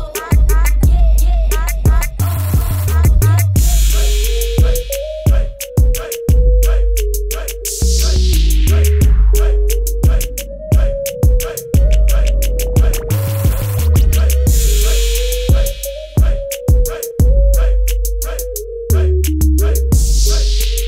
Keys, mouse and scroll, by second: 1.5 b, 2.1 right click, 3.2 click, 4.0 Return, 4.9 click, 9.6-10.3 typing, 11.7-12.7 typing, 13.0 click, 17.1 typing, 17.5 click.